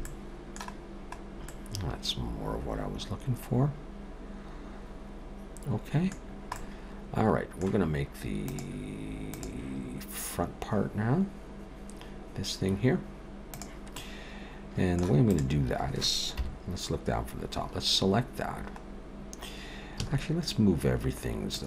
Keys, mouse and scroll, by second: 0.0 middle click, 0.8-1.5 scroll down 3, 1.5 middle click, 6.2-8.8 scroll down 2, 6.6 middle click, 13.9 middle click, 15.2 click, 16.3 KP_7, 18.9-19.4 scroll up 1, 19.9 a, 21.5 click.